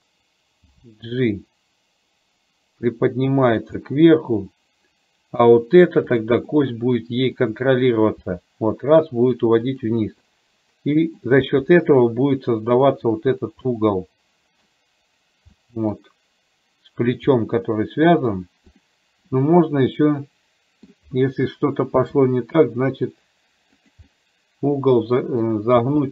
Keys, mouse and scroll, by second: 0.7 g, 3.9-5.6 middle drag, 6.2 click, 6.5 middle click, 8.4 g, 10.4-11.4 middle drag, 11.5 g, 13.9-14.9 middle drag, 15.6 middle click, 17.5-18.5 middle drag, 18.9 click, 19.4-21.0 middle drag, 22.1 r, 24.2-25.6 middle drag, 25.9 r.